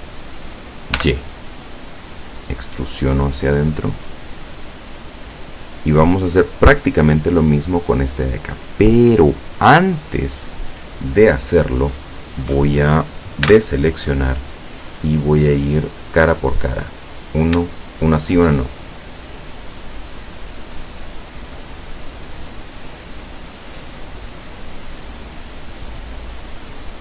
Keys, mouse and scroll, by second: 1.0 y, 4.5 click, 5.5-6.0 scroll down 4, 9.8 scroll down 2, 10.6 scroll up 2, 13.5 a, 16.1 click, 17.1 right click, 18.8 shift+right click, 20.1 shift+right click, 21.2 shift+right click, 22.1 shift+right click, 22.9 shift+right click, 23.7 shift+right click, 24.6 shift+right click, 25.5 shift+right click, 26.5 shift+right click.